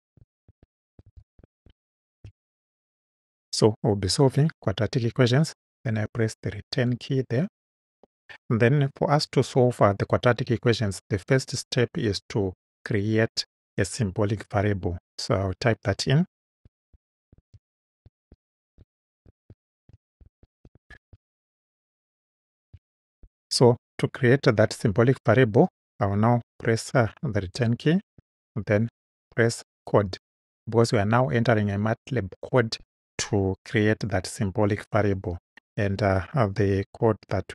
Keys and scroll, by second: 0.0-2.3 typing, 6.7 Return, 16.3-22.7 typing, 27.6 Return.